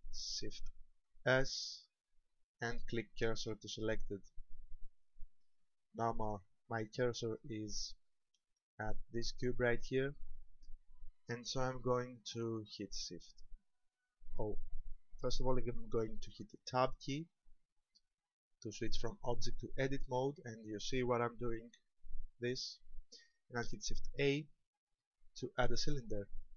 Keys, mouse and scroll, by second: 1.2 shift+s, 5.4 shift+middle click, 6.4 scroll up 3, 7.5 shift+middle click, 8.1 middle click, 16.8 Tab, 24.2 shift+a.